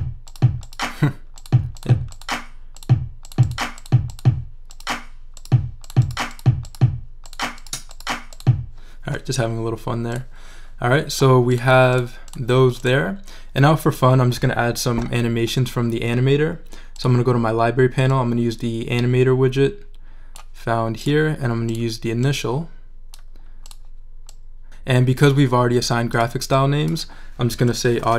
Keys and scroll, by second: 27.6-28.1 typing.